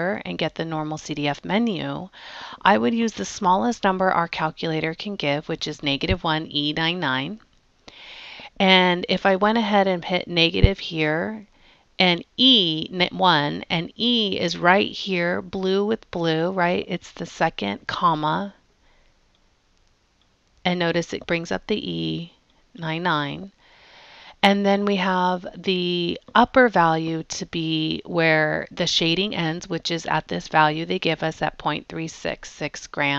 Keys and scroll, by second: 13.4 1, 20.3 ,, 22.5 9, 22.8 9, 25.2 Down.